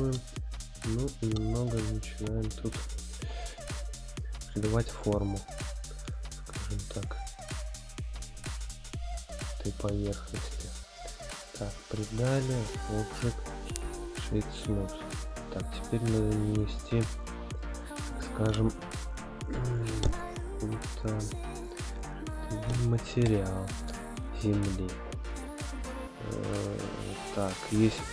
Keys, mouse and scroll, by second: 0.3-10.4 drag, 0.3-0.9 scroll down 1, 11.8-12.4 drag, 13.1 right click, 15.4-16.3 drag, 16.4 click, 17.6-21.8 drag, 23.2 n, 23.7 scroll up 1, 25.6-26.3 scroll down 1.